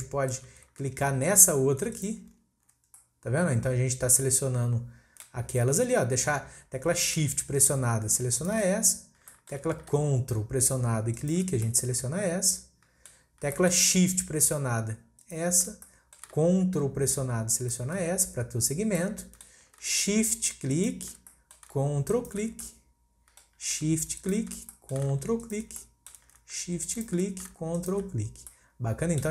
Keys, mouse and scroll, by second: 1.9 ctrl+click, 3.0-6.0 middle drag, 6.0-8.4 scroll up 1, 8.4 shift+click, 9.0 scroll down 1, 9.3-11.1 shift+middle drag, 11.1 ctrl+click, 11.6-15.2 middle drag, 15.2 shift+click, 15.8-17.6 middle drag, 17.6 ctrl+click, 19.0-20.7 middle drag, 20.7 shift+click, 21.3-22.1 middle drag, 22.1 ctrl+click, 22.7-24.2 middle drag, 24.2 shift+click, 24.7-25.4 middle drag, 25.4 ctrl+click, 25.8-26.9 middle drag, 26.9 shift+click, 27.8 ctrl+click, 28.3 scroll down 1, 28.5-29.3 middle drag.